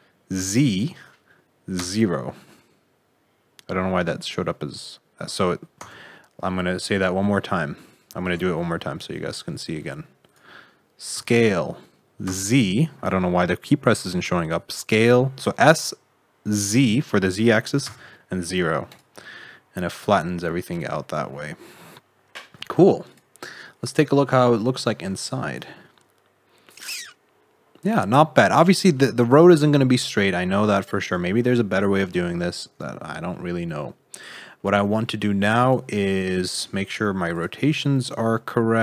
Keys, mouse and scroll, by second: 6.6 middle click, 7.6 middle click, 8.2 ctrl+z, 8.6 middle click, 10.2 click, 11.1 s, 19.3 middle click, 23.0 click, 23.3-23.7 scroll up 5, 24.7 Tab, 25.2 shift+middle click, 28.7 shift+middle click, 29.4 middle click, 31.2 shift+middle click, 32.8 scroll up 4, 33.0 middle click, 33.6-34.5 scroll down 13, 34.5 middle click, 35.6 click, 35.9-36.6 scroll up 7, 36.6 shift+middle click, 36.9-37.3 scroll down 2, 37.3 click, 37.5 r.